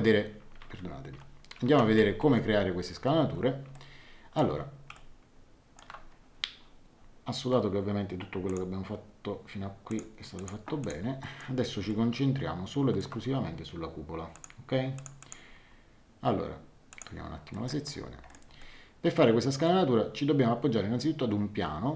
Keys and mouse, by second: 0.6 ctrl+1, 2.2 ctrl+2, 3.7 shift+middle click, 8.4 click, 9.8 click, 11.2 middle click, 11.9 shift+middle click, 14.3 click, 16.9 click, 17.5 middle click, 18.6 shift+middle click.